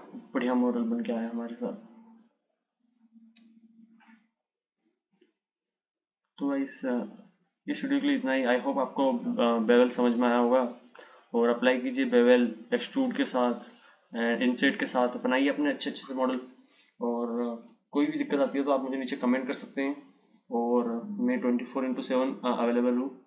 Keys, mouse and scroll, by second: 5.5 click, 7.5 click.